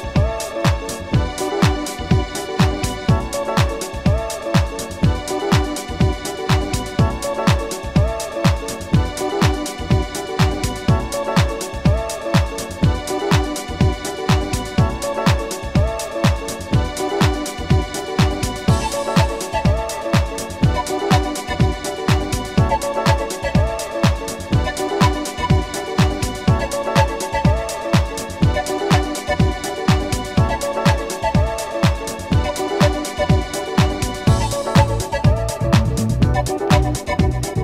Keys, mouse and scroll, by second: 0.5 click, 0.7 scroll down 1, 2.2 scroll up 1, 3.3-3.9 scroll down 1, 4.5 click, 5.3 click, 6.1 scroll down 2, 7.3 click, 8.1 click, 9.0-9.7 drag, 10.7 click, 14.0 click, 14.5 click, 18.9 click, 19.7 click, 21.2 ., 21.5 0, 21.8 2, 22.1 Return, 25.2 i, 26.7 click, 27.5 click, 28.1 click, 29.1 1, 29.5 0, 29.7 0, 30.2 Return, 33.6-34.6 drag, 36.2 i, 37.2 click.